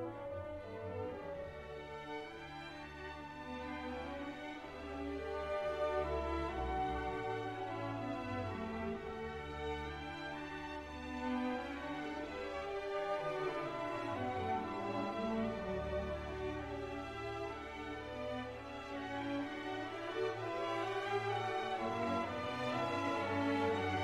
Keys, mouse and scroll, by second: 0.6 click, 2.0-3.3 drag, 3.8 click, 4.8 click, 6.0-7.9 drag, 8.3 click, 8.7 click, 9.2-10.4 drag, 12.3 click, 13.0 click, 14.4 click, 15.1 ctrl+click, 16.4 click, 17.2-23.0 drag, 23.3 scroll down 1.